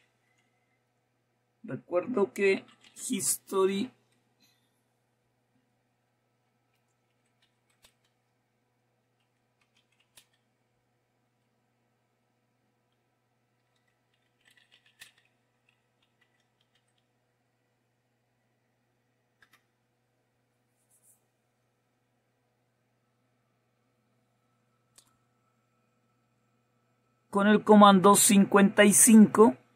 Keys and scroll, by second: 3.0-4.0 typing, 5.1 typing, 7.6-11.3 typing, 13.6-18.0 typing, 19.4 Return, 20.0 typing, 22.3 typing.